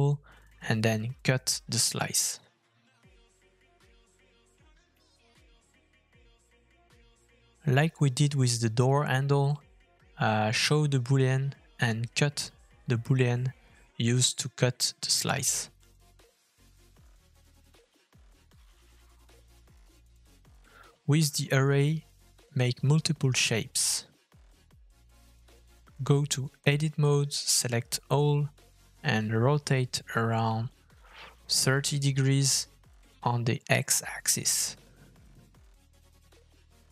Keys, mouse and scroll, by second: 3.9 middle click, 4.0 scroll up 1, 4.2 shift+middle click, 5.2 click, 5.9 f, 7.3 middle click, 7.4 scroll up 2, 7.6 shift+middle click, 10.4 middle click, 10.7 shift+middle click, 12.2 click, 13.2 shift+middle click, 13.9 f, 16.0 middle click, 22.1 middle click, 22.6 shift+middle click, 29.3 Tab, 31.6 a, 32.8 r.